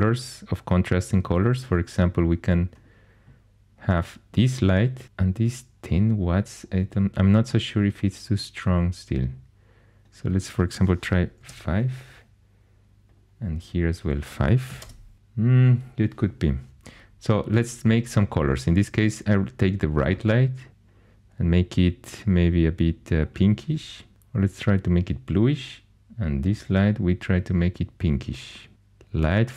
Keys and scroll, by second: 11.3 5, 11.4 Return, 14.6 5, 14.8 Return.